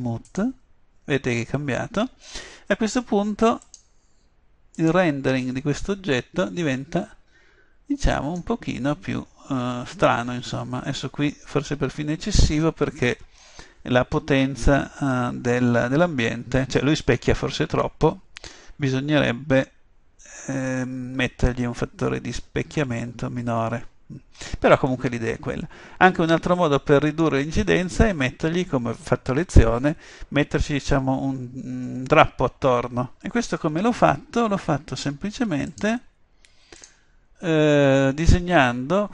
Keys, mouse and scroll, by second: 3.7-5.6 drag, 35.8-37.5 drag.